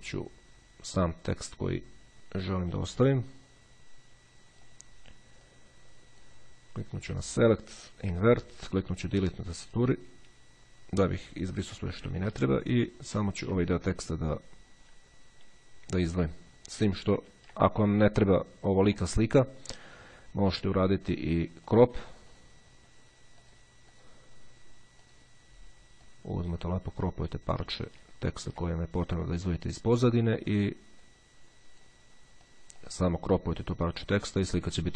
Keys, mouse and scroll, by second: 1.9-3.5 drag, 4.7 click, 5.7 click, 7.5 click, 8.4 click, 10.1 Delete, 12.7-13.1 ctrl+scroll up 2, 17.3 ctrl+z, 18.2 ctrl+scroll down 1, 21.9 click, 23.7 click, 25.2 click, 26.2-28.3 drag, 29.5 click, 30.9-32.5 drag, 32.7 click.